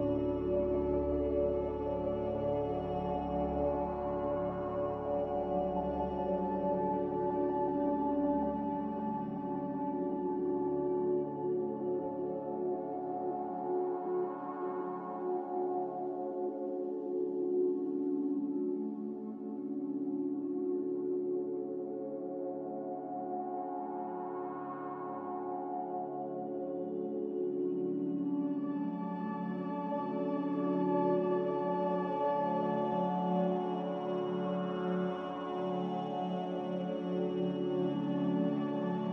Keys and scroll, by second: 5.0 m, 6.8 a, 17.0-21.0 typing, 30.7-31.3 typing, 32.7 space, 34.6-36.5 typing.